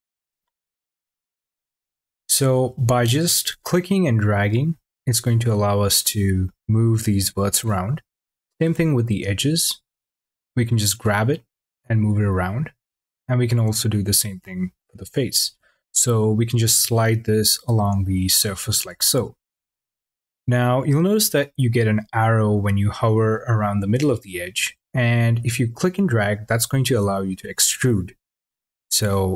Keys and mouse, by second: 3.8 click, 10.3 click, 25.5 click.